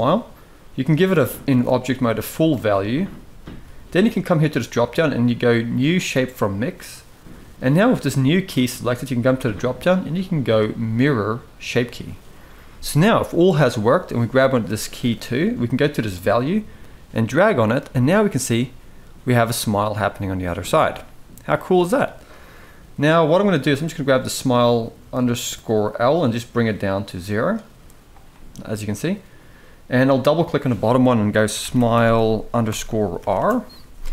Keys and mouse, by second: 0.8-2.4 drag, 4.3-5.9 drag, 9.1-11.6 drag, 16.3-17.5 drag, 18.3-21.8 middle drag, 26.5 click, 28.1-28.7 middle drag, 30.2-33.1 drag.